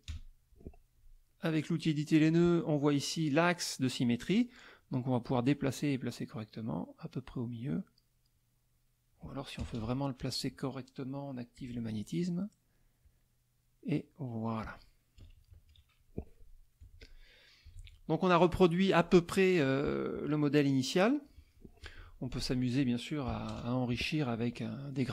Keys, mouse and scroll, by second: 0.1 KP_Add, 0.6 click, 2.2 click, 5.3-8.5 drag, 9.6 KP_Add, 10.4 click, 11.6 click, 13.0-14.3 drag, 15.2 KP_Subtract, 16.3 middle click, 16.8 F1, 17.0 click, 17.7 ctrl+s, 18.0 ctrl+middle click, 21.5 middle click, 22.0 F2, 22.4 click, 23.3 KP_Subtract, 23.5 KP_Add.